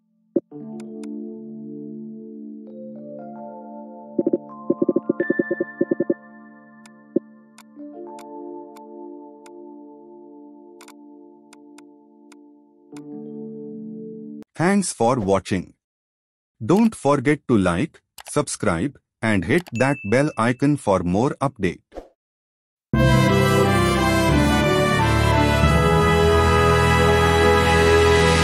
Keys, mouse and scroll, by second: 0.4 ctrl+t, 2.4-5.1 typing, 3.7 Return, 6.3 m, 7.1 ctrl+a, 10.8 double click, 13.3 ctrl+0.